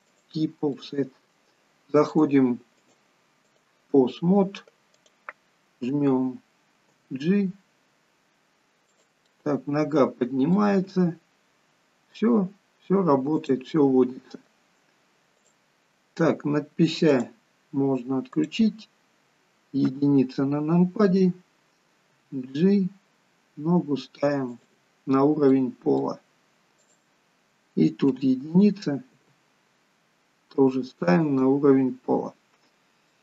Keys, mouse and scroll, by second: 0.7 middle click, 2.1 click, 2.8 click, 6.4 click, 6.4 scroll down 2, 6.9 g, 9.2 middle click, 10.7 g, 13.7 middle click, 15.4 click, 17.1 click, 19.9 click, 19.9 KP_1, 22.1 g, 25.6 middle click, 26.8 click, 28.1 KP_1, 29.1 g, 31.9 scroll down 2, 33.1 shift+middle click.